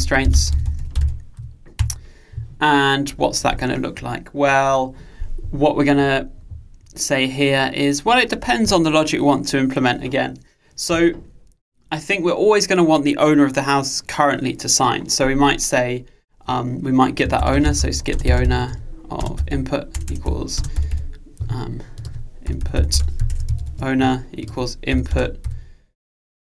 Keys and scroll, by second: 23.4 Delete.